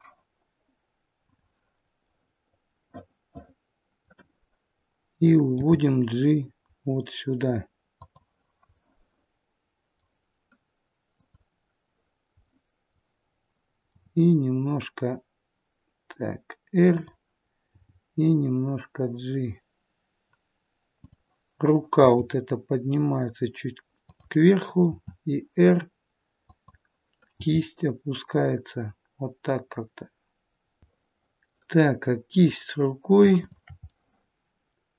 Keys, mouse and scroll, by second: 1.2 click, 2.0 middle click, 5.5 g, 11.1 middle click, 11.1 click, 12.4 middle click, 13.8 r, 17.7 g, 20.9 click, 21.9 g, 24.7 r, 27.3 g, 30.8 middle click, 30.8-31.4 scroll up 2, 32.2 click, 33.3 shift+click, 33.8 middle click.